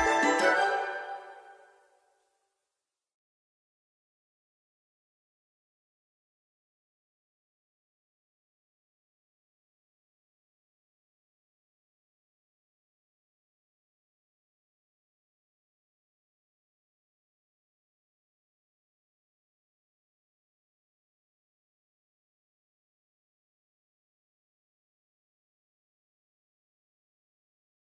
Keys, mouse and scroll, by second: 6.8-7.2 scroll up 1, 7.9-16.9 drag, 19.5 click, 23.7 ctrl+t, 24.4-27.9 drag.